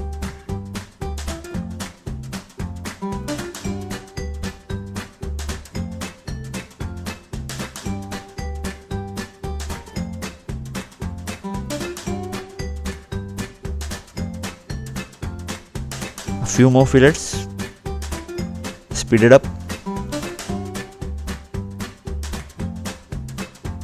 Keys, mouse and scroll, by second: 0.0 scroll down 2, 0.4 scroll up 2, 0.6 scroll down 2, 0.9 scroll up 2, 2.0 click, 3.6 click, 3.7 right click, 4.5 scroll up 2, 5.3 scroll up 1, 5.4 scroll down 1, 5.7 middle click, 6.8 click, 7.4 scroll down 2, 8.2 scroll down 1, 9.4 click, 11.7-12.0 scroll up 2, 13.5 middle click, 14.6-15.1 scroll down 1, 15.3 click, 15.4 scroll down 2, 19.1 click, 19.9 scroll up 2, 20.2 scroll down 2, 20.3-20.6 scroll up 2, 20.9 scroll down 2, 21.2 click, 21.7 click.